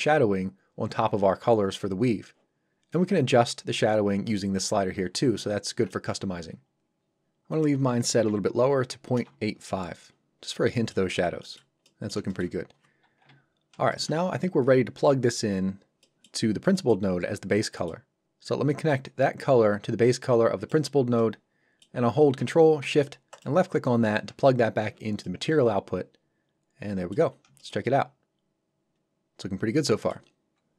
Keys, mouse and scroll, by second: 1.9-2.9 scroll down 1, 2.9 click, 5.7 Escape, 7.5 click, 8.6 KP_8, 9.1 Return, 10.1 scroll down 1, 10.4 middle click, 11.4 shift+middle click, 11.8 middle click, 12.3 shift+middle click, 12.6-13.2 scroll down 1, 13.2 KP_7, 13.9 shift+middle click, 15.4 scroll down 1, 16.0 middle click, 16.4 scroll down 1, 16.7 middle click, 17.1-17.4 scroll up 1, 17.7 middle click, 18.9 click, 21.2 middle click, 23.3 ctrl+shift+click, 25.2 shift+middle click, 27.3 scroll up 1, 27.6 shift+middle click, 27.8 middle click.